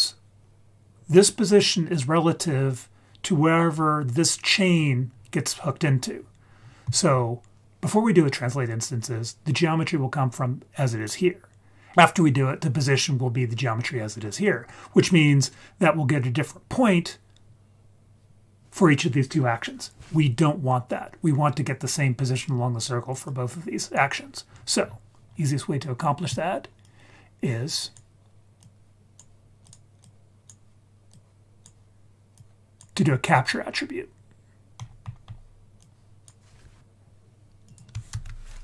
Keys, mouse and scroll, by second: 2.4-5.1 scroll down 2, 5.1-5.8 scroll down 3, 5.8-6.4 scroll down 3, 6.4-7.6 scroll up 7, 23.2-24.0 drag, 24.4-25.2 scroll down 3, 25.2-26.3 scroll up 5, 26.8-28.0 drag, 28.6-29.2 drag, 29.6 click, 29.9-30.4 drag, 31.1-31.6 drag, 32.3-32.8 drag, 33.0-33.4 scroll down 2, 33.4-33.9 scroll up 1, 33.9-34.2 scroll down 1, 34.8-35.8 scroll up 6, 35.8-36.3 drag, 36.8-37.6 scroll down 3, 37.6 click, 38.1 shift+a.